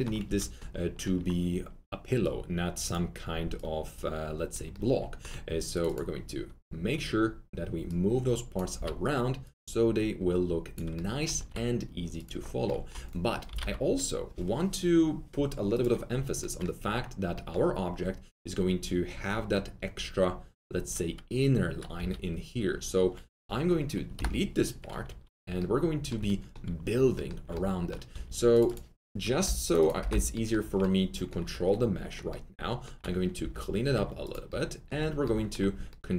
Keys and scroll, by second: 0.2 alt+F3, 8.7 r, 11.3 alt+1, 13.4 alt+t, 13.5 alt+z, 21.9 4, 24.1 4, 25.0 alt+q, 28.1 alt+2, 29.9 ctrl+BackSpace, 33.4 alt+2.